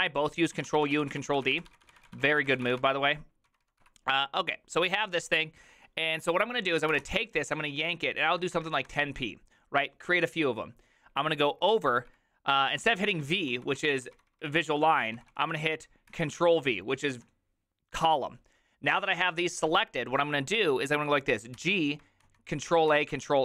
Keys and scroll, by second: 0.0-1.0 typing, 3.2-4.3 typing, 11.4-12.1 typing, 13.3-16.1 typing, 16.1 ctrl+v, 17.1 l, 22.9 ctrl+a.